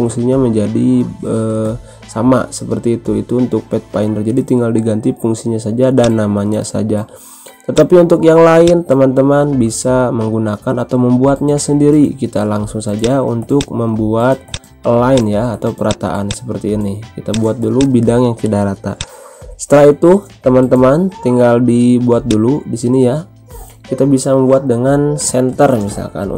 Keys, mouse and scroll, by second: 0.1 shift+F2, 3.0 ctrl+z, 5.9-12.1 drag, 12.1-12.5 scroll down 1, 12.9 click, 13.7-18.9 drag.